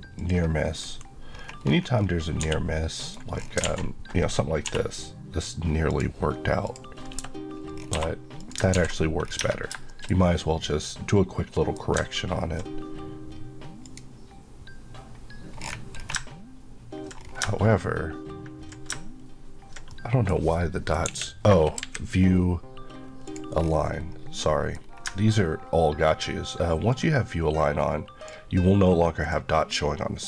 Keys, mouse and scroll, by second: 0.2 click, 0.8 KP_Decimal, 1.3 scroll up 1, 2.4 scroll up 1, 2.4 g, 3.1 right click, 3.4 scroll, 3.5 scroll down 1, 3.6 alt+a, 4.7 k, 5.9 click, 7.2 KP_Enter, 7.8 scroll, 7.9 2, 8.4 click, 8.8 ctrl+x, 9.3 scroll down 1, 9.9 shift+middle click, 13.9 middle click, 16.2-16.7 ctrl+scroll down 1, 16.7-17.3 scroll down 2, 19.9 middle click, 21.1 KP_8, 23.3 click, 23.6 scroll up 1, 24.4 middle click, 24.8-25.6 scroll up 2, 26.7 scroll up 1, 27.0 click, 30.0 middle click.